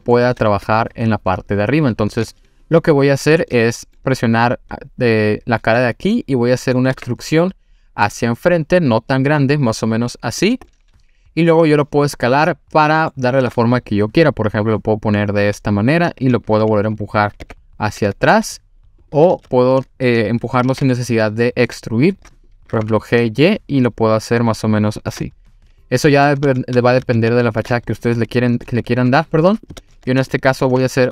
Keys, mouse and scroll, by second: 0.6 3, 1.6 click, 2.6 click, 3.1-3.6 scroll down 2, 3.5-4.0 middle drag, 4.2-5.1 scroll up 1, 5.8-6.6 middle drag, 6.9 e, 10.4 click, 10.7-13.1 middle drag, 13.4 s, 16.3 click, 17.4 e, 19.0 click, 19.3 ctrl+z, 20.7 g, 20.7 z, 22.4 click, 22.7 g, 22.8 y, 25.0 click, 25.2-26.3 middle drag, 26.5 ctrl+z, 26.8 ctrl+z, 27.3 ctrl+z, 27.8 middle click, 29.0 s, 29.6 click, 29.8 ctrl+z, 30.3 middle click, 30.8 e.